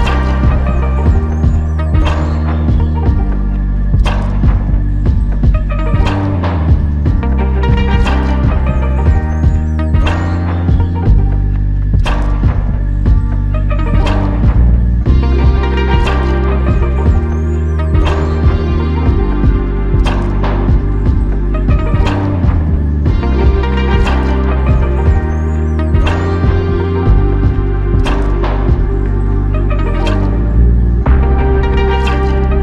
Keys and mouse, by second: 4.9 alt+click, 9.6 alt+click, 12.8 ctrl+click, 15.2 ctrl+click, 16.9 typing, 18.8 alt+click, 24.5 ctrl+click.